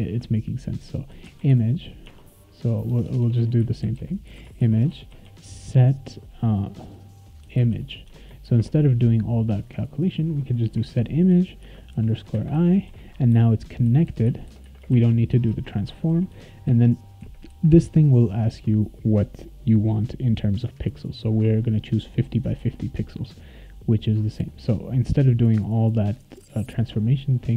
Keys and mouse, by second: 0.8-5.7 typing, 2.0 Tab, 7.2-8.4 typing, 11.6 shift+-, 11.9 i, 12.5 ;, 12.8 ctrl+s, 15.5 ctrl+x, 16.1 ctrl+s, 22.6 ctrl+s.